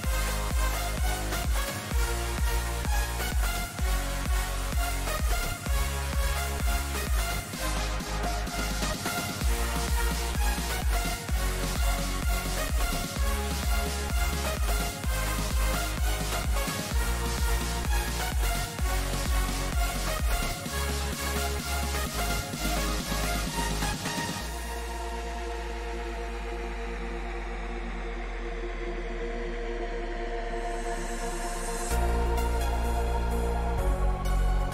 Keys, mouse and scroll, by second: 4.3 a, 5.7-7.6 drag, 7.1-11.2 right drag, 8.2 KP_3, 8.8-13.3 drag, 9.0 z, 9.4-11.2 middle drag, 17.9 g, 23.0-25.0 drag, 23.8 a, 25.0-29.0 middle drag, 25.8 z, 30.3-34.7 middle drag.